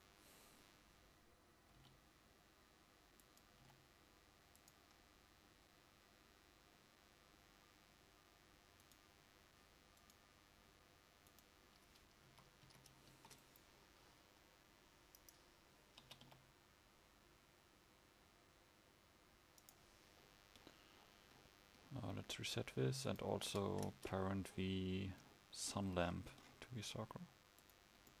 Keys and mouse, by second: 3.7 g, 5.1 g, 12.4 a, 12.8 a, 13.1 ctrl+s, 16.1 r, 16.4 click, 23.9-28.2 drag.